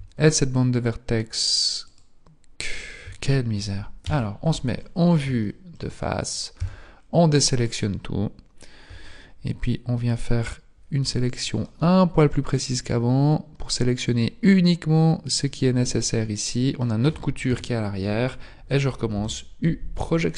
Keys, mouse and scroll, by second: 0.2 alt+shift+right click, 1.8 alt+shift+right click, 4.0 KP_1, 4.7-5.4 scroll down 2, 5.4 shift+middle click, 5.4 scroll down 4, 6.6 a, 7.0-9.0 scroll down 2, 9.0-10.2 scroll down 1, 10.2-11.0 scroll up 2, 11.0 b, 14.2 b, 15.4 middle click, 17.4 KP_1, 19.1 u.